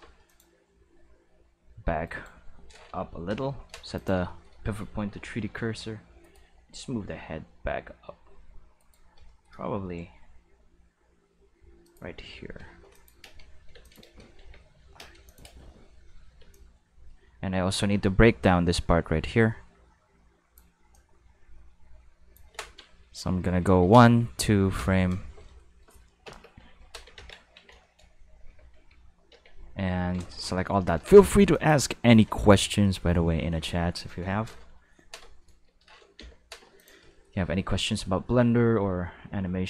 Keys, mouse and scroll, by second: 0.2 click, 0.8 r, 2.0 right click, 3.2 ., 3.9 click, 5.4 r, 6.2 right click, 6.6 r, 8.7 right click, 9.7 r, 11.8 click, 12.9 click, 13.2-16.3 typing, 13.8-14.2 drag, 15.2 click, 16.5-20.5 drag, 20.9-22.3 drag, 26.2 Home, 27.1 ctrl+s, 27.5 Tab, 27.8 shift+middle click, 28.4 q, 28.7 a, 29.3 Tab, 30.0 a, 31.5 click, 36.1 ., 36.7 click, 37.8 r.